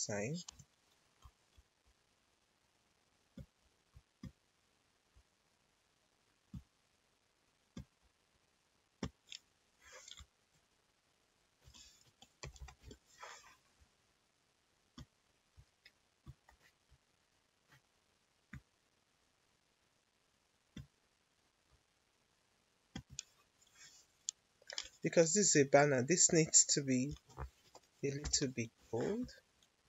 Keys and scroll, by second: 11.3-13.2 typing, 27.0 1, 27.6 5, 28.2 0, 28.7 Return.